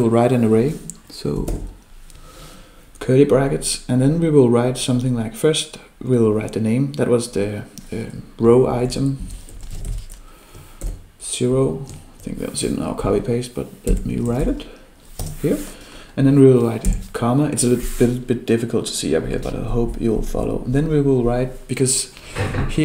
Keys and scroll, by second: 1.5 ctrl+alt+7.